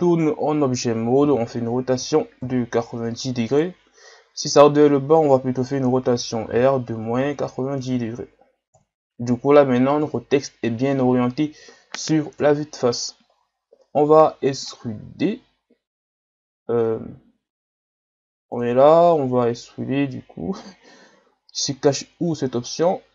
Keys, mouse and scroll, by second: 0.0 KP_3, 1.2 r, 6.5 r, 10.0 KP_1, 12.4 KP_3, 13.3-13.7 shift+scroll up 4, 14.8 scroll up 2, 15.5 scroll down 5, 18.5-19.7 drag, 19.7 scroll up 1, 20.4 scroll up 5, 21.1 scroll up 3, 21.9-23.1 drag.